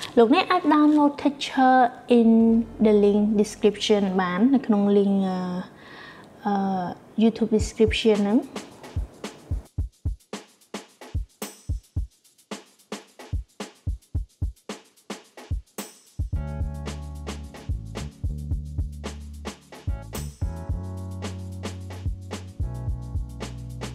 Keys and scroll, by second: 13.8-15.0 typing.